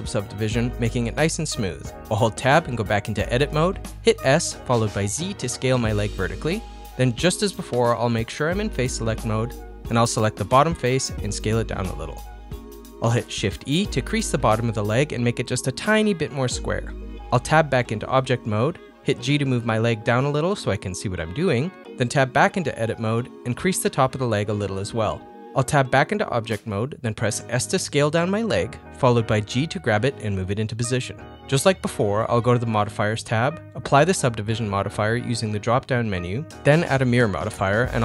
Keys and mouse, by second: 2.7 ctrl+z, 3.0 Tab, 3.8 click, 4.1 middle click, 5.3 s, 7.0 click, 7.6 3, 7.8 click, 9.8 click, 10.2 middle click, 10.6 s, 11.8 middle click, 12.7 shift+e, 15.6 middle click, 16.6 middle click, 17.5 Tab, 18.7 KP_1, 19.0 Tab, 19.1 g, 20.2-22.2 middle drag, 22.4 Tab, 24.3 shift+e, 25.9 Tab, 26.3 ctrl+middle click, 26.5 middle click, 27.2 KP_1, 27.6 shift+middle click, 27.8 ctrl+middle click, 28.2 s, 29.8 g, 31.5 middle click, 32.1-33.2 middle drag, 36.6 click, 37.8 click.